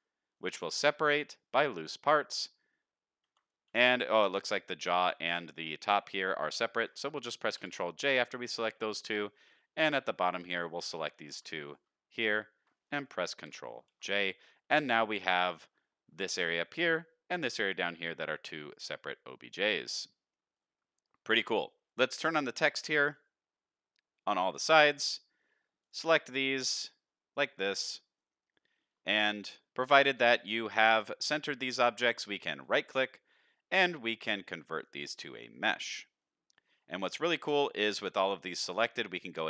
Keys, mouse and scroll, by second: 3.2 Tab, 3.7 click, 4.3 shift+click, 4.6-6.3 scroll up 2, 7.6 ctrl+j, 8.6 shift+middle click, 9.0-9.3 middle drag, 9.6-10.0 shift+middle drag, 10.3 click, 10.9 shift+click, 11.6 click, 12.1 shift+click, 13.3 ctrl+j, 14.0 alt+a, 14.5-15.2 middle drag, 15.4-15.8 scroll down 2, 16.4-16.9 middle drag, 17.3 click, 17.8-18.2 middle drag, 18.6 click, 19.0-19.5 middle drag, 19.7 shift+middle drag, 20.1-20.6 middle drag, 21.6 middle drag, 22.4 click, 22.7 click, 23.0 click, 24.5 shift+middle drag, 25.1 click, 25.8 click, 26.6 shift+click, 26.9-27.4 middle drag, 27.8 shift+click, 28.2-28.6 middle drag, 29.2-29.5 shift+middle drag, 30.1 shift+click, 30.4-30.9 middle drag, 31.4 shift+middle drag, 31.8 middle drag, 32.6-35.5 right drag, 36.2-36.8 middle drag, 37.0 shift+middle click.